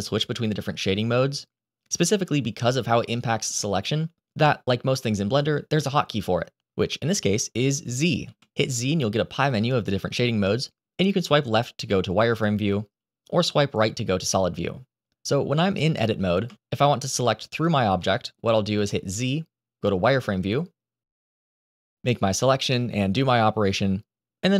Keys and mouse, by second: 0.2 click, 8.1 z, 13.3 z, 15.6 click, 16.3 Tab, 17.4 click, 17.9 middle click, 19.0 z, 21.6 click, 23.9 z.